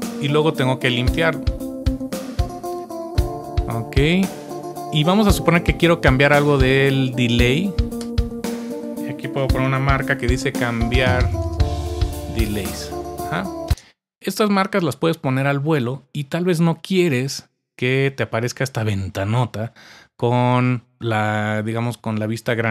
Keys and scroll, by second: 0.0-1.6 typing, 8.1 typing, 9.3-13.6 typing, 17.9-18.6 typing.